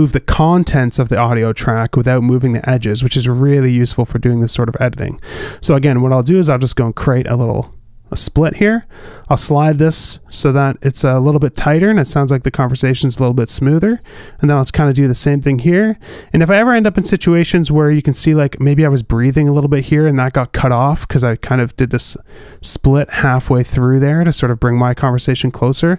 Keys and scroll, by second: 3.7 super+z, 4.1 super+z, 4.7 super+z, 5.6 super+z, 6.1 super+z, 7.9 alt+b, 12.3 space, 14.9 space, 15.2 alt+b, 22.8 super+z, 23.5 super+z, 25.3 alt+b.